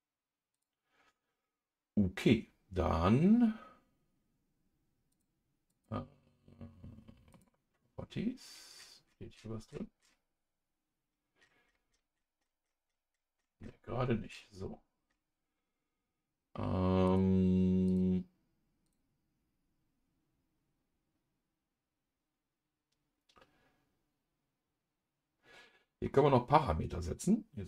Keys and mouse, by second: 0.5 click, 5.1 click, 5.7-7.4 drag, 17.0 click, 18.8-26.3 drag.